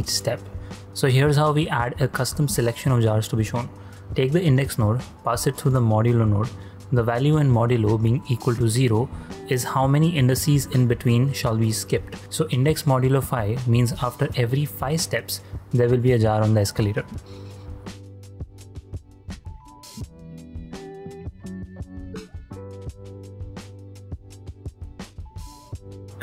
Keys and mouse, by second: 0.0 click, 1.9 click, 2.8 shift+a, 5.2 click, 5.9-6.3 drag, 8.7 click, 9.5 click, 11.3-11.8 drag, 12.1 click, 13.2 ctrl+click, 13.6 shift+click, 14.5-15.2 drag, 19.0-19.8 drag, 20.6 shift+space, 23.0 shift+space, 23.1-23.6 shift+drag, 23.9 ctrl+click, 24.5 shift+space, 26.0 ctrl+space, 26.0 g.